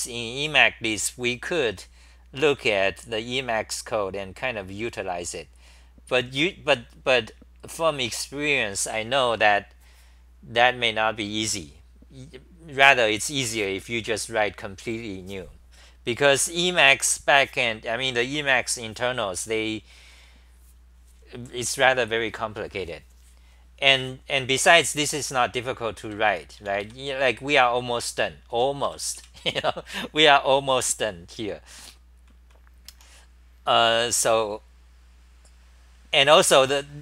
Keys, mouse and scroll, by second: 25.8-27.1 typing, 29.8 super+-, 29.8-31.9 scroll up 13, 29.8 ,, 31.9-32.2 c, 32.4 c, 32.9 t, 33.8-34.3 scroll down 1.